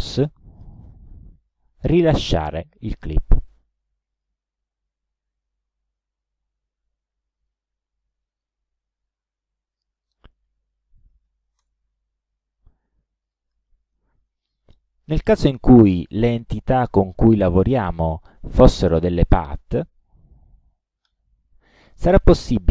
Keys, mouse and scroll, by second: 0.6 right click, 4.2 click, 7.4 click, 8.3 click, 10.0 click, 10.9 1, 11.1 KP_0, 11.6 Return, 13.3 click, 15.1 click, 16.1 shift+click, 19.9 click, 21.1 click, 22.1 right click.